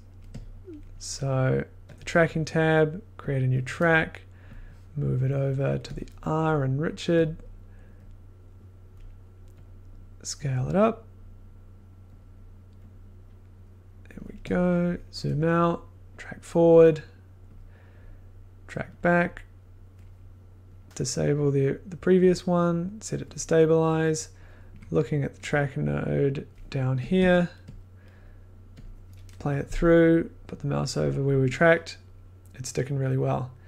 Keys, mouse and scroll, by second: 0.8 click, 0.9 middle click, 2.0 click, 6.2 click, 6.3 middle click, 6.6 middle click, 7.4 click, 8.0 middle click, 8.9 click, 14.8 middle click, 15.1 middle click, 16.1 click, 22.2 click, 25.5 click, 26.2 click, 27.1 click, 27.2 1, 27.7 click, 27.8 middle click, 28.2 middle click, 28.8 click.